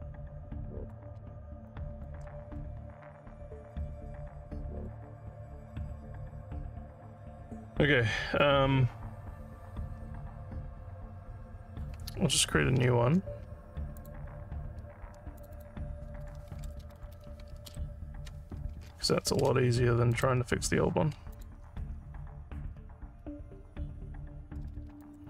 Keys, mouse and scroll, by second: 1.6 ctrl+click, 2.6-4.8 alt+middle drag, 14.0 click, 15.4 click, 15.5 click, 16.4-17.7 typing, 20.1 click, 21.3 click, 25.0-25.2 alt+drag.